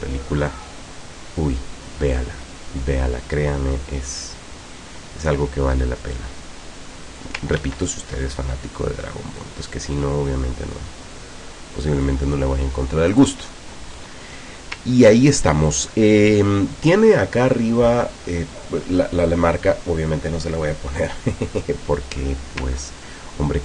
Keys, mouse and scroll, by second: 0.0-4.5 drag, 6.2-7.5 drag, 7.7 ctrl+z, 9.5-12.3 drag, 13.2 click, 14.0-14.6 scroll up 2, 15.3 ctrl+scroll down 2, 15.9 ctrl+middle click.